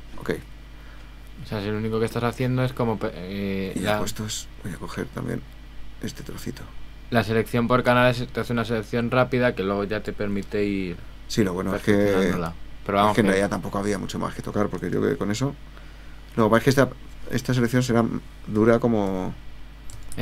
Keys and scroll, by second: 16.6 super+-, 18.6 super++, 19.9 super+-.